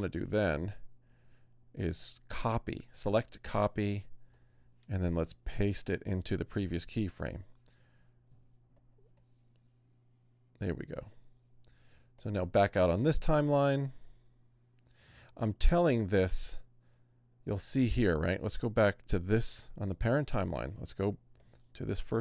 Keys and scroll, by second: 1.8 super+c, 5.3 BackSpace, 5.9 super+BackSpace, 6.5 shift+super+v, 20.1 super+-, 21.1 super+space.